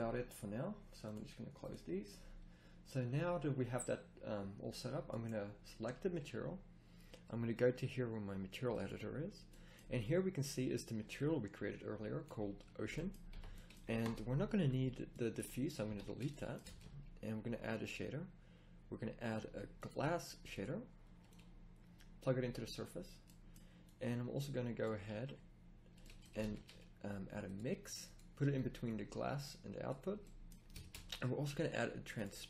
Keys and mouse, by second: 3.3-4.4 middle drag, 19.8 a, 22.5-32.4 drag, 27.5 a, 32.2 a.